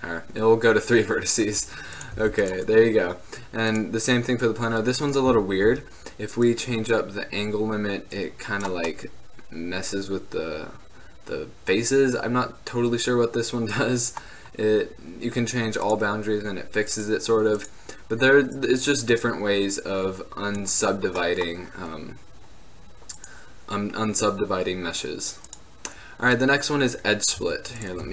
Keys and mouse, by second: 5.5 z, 5.8 z, 9.2-11.1 middle drag, 14.9-20.9 middle drag, 22.3-23.3 middle drag, 23.3-25.3 drag, 25.3 middle click, 25.6-27.1 drag, 27.6 x.